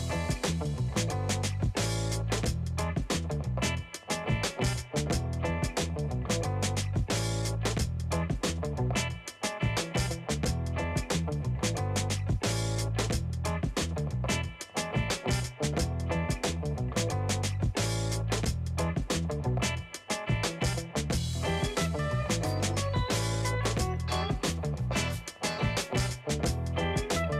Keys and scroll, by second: 12.1 space, 12.6-14.2 alt+shift+space, 14.5 shift+space, 18.6 space, 19.1 space, 19.9 space, 22.4 2, 22.8 Return.